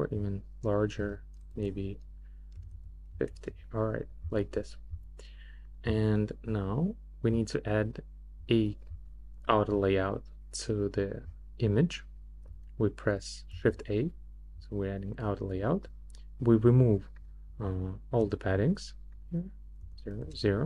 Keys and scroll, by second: 1.0-3.2 typing, 13.5 shift+a, 18.2 0, 19.8 0, 20.2 Return.